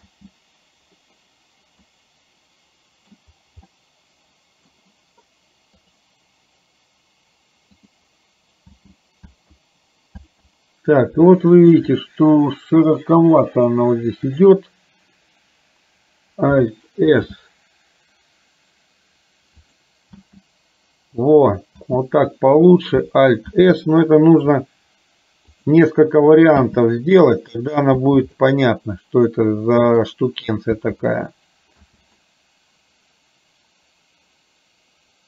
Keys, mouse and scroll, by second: 0.2 space, 2.0-3.2 middle drag, 3.8 middle click, 8.8 space, 9.4 space, 10.3 space, 11.3 shift+middle click, 17.2 alt+s, 20.3 space, 21.8 space, 23.7 alt+s, 26.6 space, 28.1 space, 28.5-30.2 middle drag, 30.9 space, 31.9 space, 32.4-35.2 middle drag.